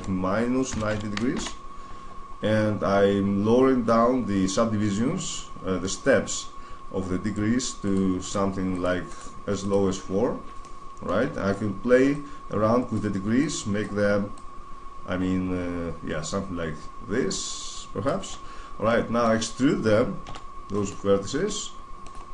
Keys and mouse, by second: 2.8 middle click, 7.6-11.4 drag, 11.9-17.6 drag, 18.6-20.6 middle drag, 20.0 e.